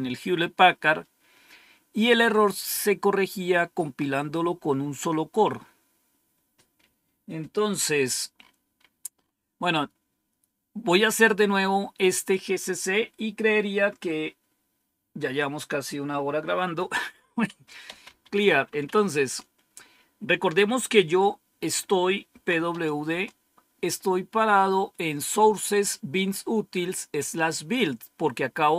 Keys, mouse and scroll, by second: 7.9-10.3 scroll up 3, 11.3-12.1 scroll up 2, 12.1 click, 17.6-19.3 typing, 22.0-23.1 typing.